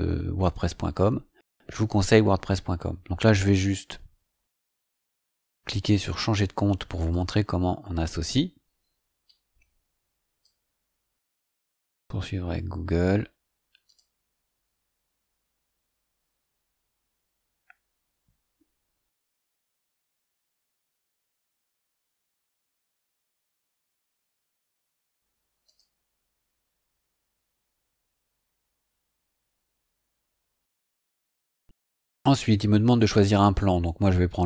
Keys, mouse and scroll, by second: 6.9 click, 9.2-10.6 drag, 11.4 click, 13.8 click, 25.6 click, 33.5-34.4 scroll down 5.